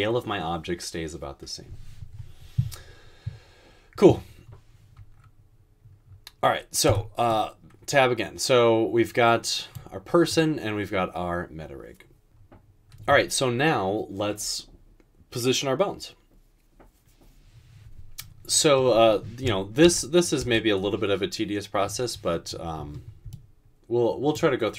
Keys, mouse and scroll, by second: 6.9 Tab, 12.2 Tab, 19.9-20.4 typing.